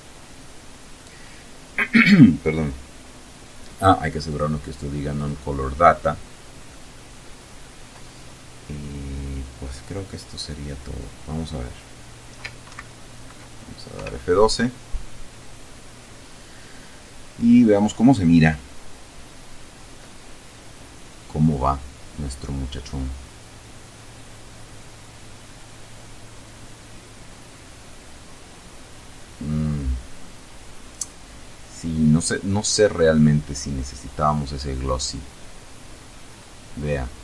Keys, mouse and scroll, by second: 3.6 click, 4.5 click, 6.0-9.2 middle drag, 9.3-10.3 middle drag, 12.0 ctrl+Right, 13.3 F12.